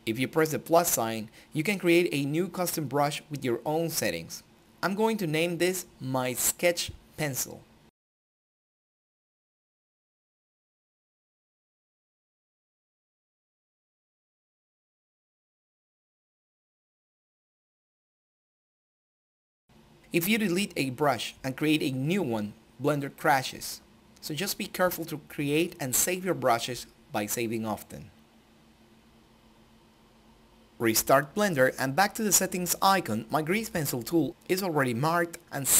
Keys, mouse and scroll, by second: 1.5 click, 3.2-5.9 typing, 6.3 Return, 9.1-12.0 drag, 15.6 click, 20.3 click, 22.7 click, 27.8 click, 28.8 click, 30.2 click, 31.9-34.9 typing.